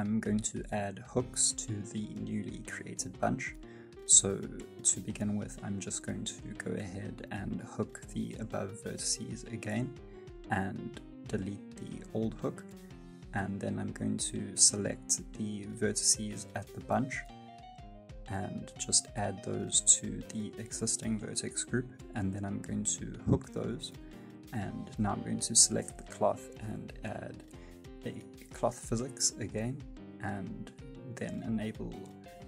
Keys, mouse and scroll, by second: 0.2 middle click, 1.3 click, 2.7 click, 2.7-3.2 scroll down 1, 3.3 alt+a, 4.4 click, 4.9 scroll up 2, 5.1 middle click, 5.6 shift+middle click, 6.7 scroll down 1, 8.8 ctrl+h, 10.0 Tab, 10.5 right click, 11.2 x, 12.1 middle click, 12.5 scroll down 3, 12.8 shift+middle click, 13.2 middle click, 13.6 right click, 13.9 middle click, 14.2-14.5 scroll up 3, 14.5 Tab, 14.9 shift+middle click, 15.3 scroll up 1, 15.7 alt+z, 16.8 click, 19.8 click, 21.4 ctrl+h, 22.3-23.3 scroll down 3, 22.7 Tab, 23.3 right click, 24.7 click, 26.1 click, 29.0 click, 29.0-30.1 scroll down 15, 30.1-30.6 scroll down 6, 30.6 click.